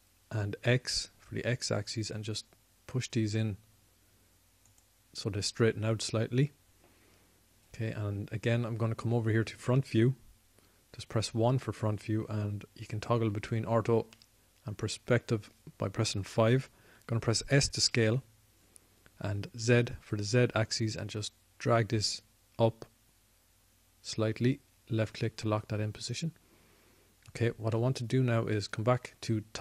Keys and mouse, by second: 12.9 KP_1, 14.6 KP_5, 15.1 KP_5, 19.6 s, 27.0-29.6 drag.